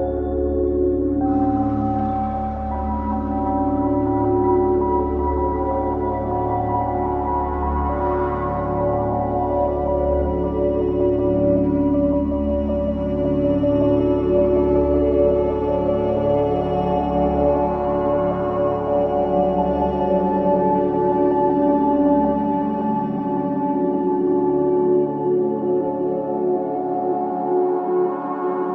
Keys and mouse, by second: 0.2 click, 0.6 click, 1.1 typing, 4.0 space, 5.1-6.6 drag, 6.7-8.9 typing, 7.9-9.4 drag, 11.6 typing, 14.1-15.2 drag, 16.0 typing, 17.6 click, 19.5 click, 20.6 typing, 21.1-22.4 drag, 23.8-24.3 typing, 25.3 click, 25.9-26.6 typing, 26.1 click, 28.3 typing.